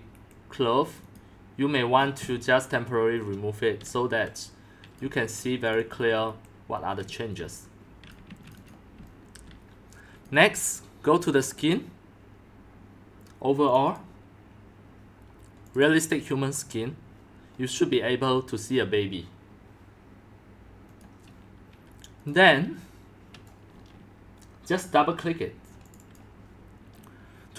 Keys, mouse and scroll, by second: 0.1 Delete, 0.9-2.0 drag, 2.0-2.3 scroll, 2.4-2.7 scroll up 10, 2.7 Delete, 3.8-5.6 typing, 5.1 click, 5.7 click, 5.9 click, 6.2 Delete, 7.0-10.2 typing, 8.4 click, 10.2-11.6 drag, 13.9 click, 15.7 click, 21.1 click, 21.3 click, 26.1 click.